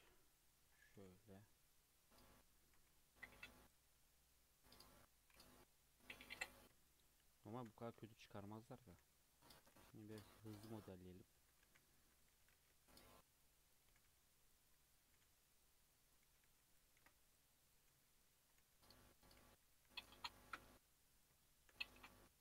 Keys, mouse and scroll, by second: 0.9 g, 2.7 alt+z, 2.9 scroll down 2, 3.1-5.7 middle drag, 5.7 KP_3, 6.0-6.3 scroll up 2, 6.8-7.5 shift+middle drag, 7.5 shift+d, 8.8 s, 9.7 g, 11.0-11.4 scroll up 2, 11.4 Tab, 11.6 alt+z, 11.9 click, 12.3 g, 13.4 click, 13.9 g, 14.7 click, 15.3 g, 15.9 click, 16.3 g, 17.0 ctrl+r, 17.9 3, 18.0 click, 18.6 g, 19.7 e, 20.6 g, 21.4 shift+middle click, 21.8 Tab, 22.0-22.4 scroll down 4.